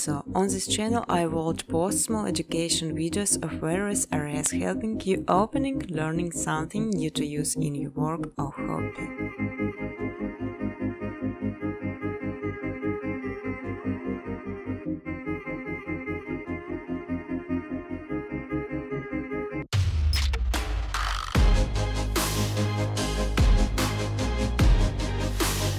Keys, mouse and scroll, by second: 0.0-0.5 typing, 0.3 click, 1.6 click, 3.1 click, 4.7 click, 5.4 click, 5.8 click, 6.1 click, 6.4 click, 6.6 click, 6.9 click, 7.2 click, 7.5 click, 7.8 click, 8.1 click, 8.7 click, 9.1-10.3 scroll, 10.3 click, 10.8 click, 11.1-12.1 scroll, 11.1 2, 12.1 click, 12.8-13.8 typing, 13.5 click, 14.2 click, 15.1 click, 15.3 ctrl+c, 15.5 ctrl+d, 15.7 ctrl+d, 15.9 ctrl+d, 16.2 ctrl+d, 16.6 click, 16.8-17.7 scroll, 17.7 click, 18.2-19.2 typing, 20.3 click, 21.2 click, 21.3-21.8 typing, 22.2 click, 22.7 click, 23.5-24.3 typing, 23.6 click, 24.6 click, 25.2 click.